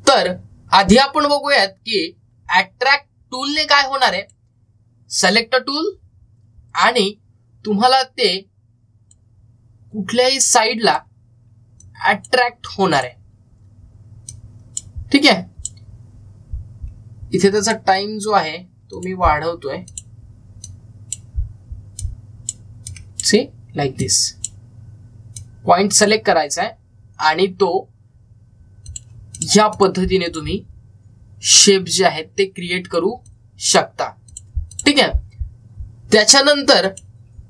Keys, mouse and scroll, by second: 5.0 click, 8.7-29.4 drag, 29.7 click, 33.7 click.